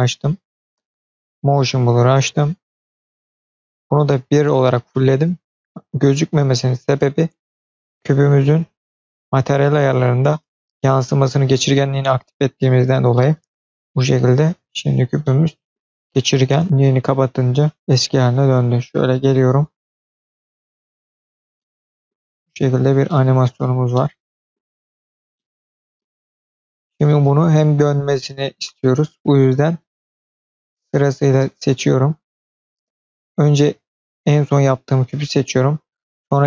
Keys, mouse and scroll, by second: 1.3-2.4 scroll down 1, 7.3 click, 9.2-9.5 drag, 9.5-12.2 scroll down 2, 12.2 click, 13.0-14.1 middle drag, 15.1 middle click, 15.8 scroll down 1, 16.0-16.6 middle drag, 18.3-19.5 drag, 19.6 space, 21.4-22.0 middle drag, 22.8 scroll up 1, 22.9 middle click, 23.5 scroll up 2, 24.4 middle click, 25.2-25.9 middle drag, 26.8 space, 28.2-29.1 scroll down 2, 30.3 click, 31.2-31.8 shift+drag, 33.6 click, 36.3 shift+click.